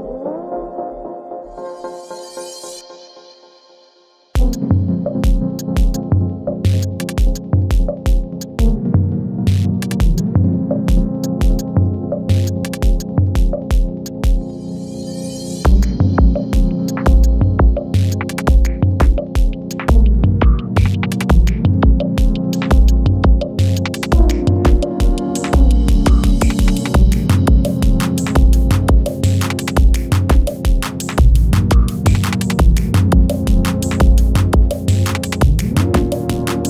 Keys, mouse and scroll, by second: 9.0 Return, 10.0-11.5 scroll down 1, 11.5 click, 13.9-14.9 alt+scroll up 1, 15.2-15.6 alt+scroll down 1, 16.8 shift+click, 18.9 space, 19.2 click, 19.5 space, 20.4-22.8 drag, 24.4 shift+click, 25.7 Right, 28.9-36.6 drag.